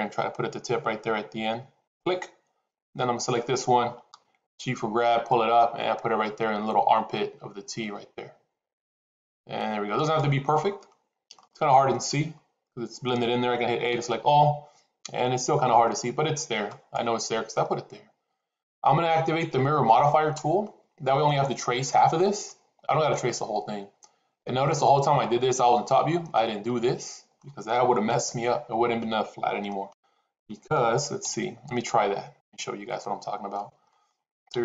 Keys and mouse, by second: 3.1 click, 4.4 g, 11.3 shift+middle click, 13.8 a, 16.6 click, 26.2-27.3 middle drag, 28.0 KP_7, 29.5 middle click, 31.1 ctrl+z, 31.8 ctrl+z, 32.3 ctrl+z, 32.9 middle click, 33.8 middle click, 34.4 KP_7.